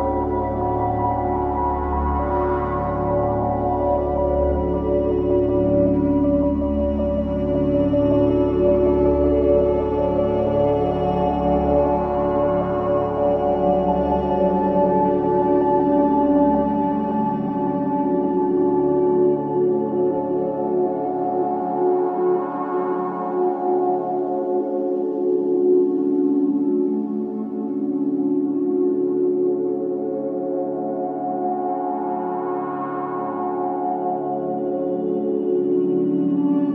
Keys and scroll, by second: 0.0 4, 12.0 F9, 15.8 F1, 16.5 1, 30.3 4, 33.0 3.